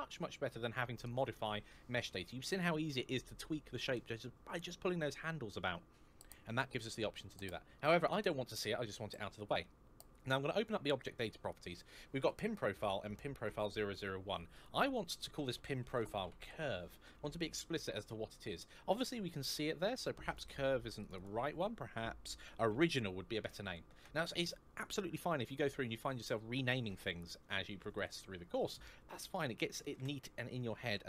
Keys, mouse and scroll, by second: 7.7 click, 10.4 click, 12.1 click, 13.7 click, 15.3-16.2 typing, 16.7 Return, 20.0 click, 22.4-23.4 typing, 23.8 Return, 27.6 click, 29.6 BackSpace, 30.6 space, 30.9 Return.